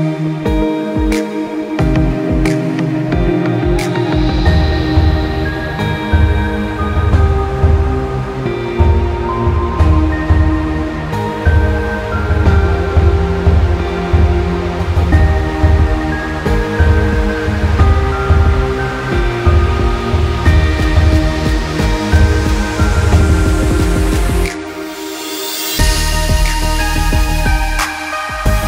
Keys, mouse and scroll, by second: 1.7 s, 4.7 click, 5.7 click, 6.1 click, 6.6 click, 6.9 scroll down 1, 7.2 middle click, 7.6 middle click, 8.0 click, 8.4 middle click, 9.0 click, 9.5 click, 9.9 click, 10.3 middle click, 10.7-11.1 scroll down 2, 11.0 middle click, 11.4-12.1 scroll up 3, 11.7 middle click, 12.3 scroll down 1, 13.5-14.0 scroll down 3, 13.8 middle click, 14.5 shift+a, 15.9 scroll down 5, 16.1 middle click, 16.9 s, 17.9-18.5 scroll up 1, 18.5-18.9 scroll up 4, 18.5 `, 19.5 click, 21.1 click, 21.7 click, 22.5-22.8 scroll down 5, 22.7 middle click, 23.5 click, 23.9 click, 26.2-26.7 scroll down 3, 26.4 middle click, 27.1 r.